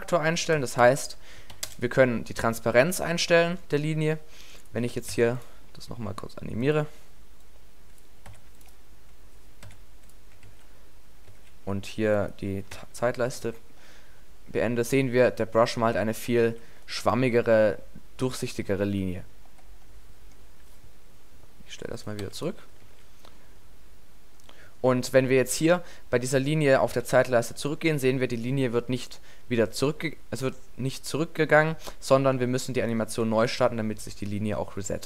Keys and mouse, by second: 2.5-3.8 middle drag, 3.8-9.5 drag, 5.1 i, 8.3 i, 9.5-12.2 middle drag, 9.7 i, 10.5 alt+a, 11.3 alt+a, 12.8 e, 13.4 alt+a, 16.5 alt+a, 22.9 alt+a, 24.0-25.5 middle drag, 27.1 alt+a, 33.2 alt+a.